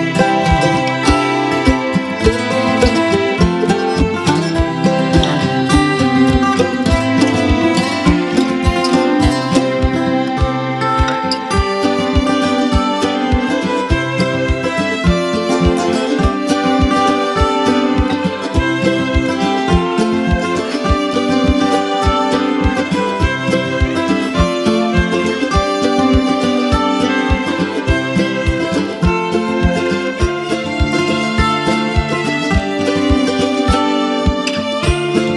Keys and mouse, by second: 1.9 click, 4.3 Tab, 7.0 z, 8.2-10.0 drag, 11.6 F11, 21.4 Tab, 29.9 click, 31.2 right click.